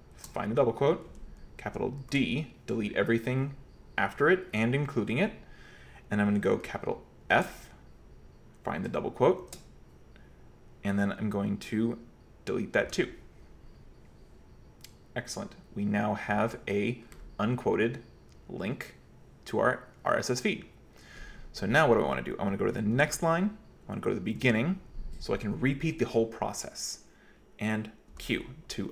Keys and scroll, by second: 0.2 shift+', 2.0 typing, 7.3 typing, 9.2-9.9 typing, 12.9 typing, 23.0 typing, 24.4 typing, 28.1 typing.